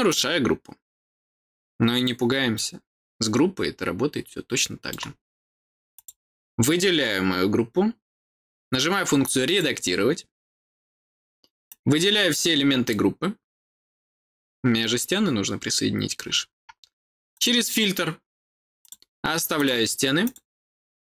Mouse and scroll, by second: 0.0 click, 2.4-4.8 middle drag, 5.8 click, 9.3 click, 11.6 click, 17.2 click, 18.7 click, 19.4 click, 20.1 click.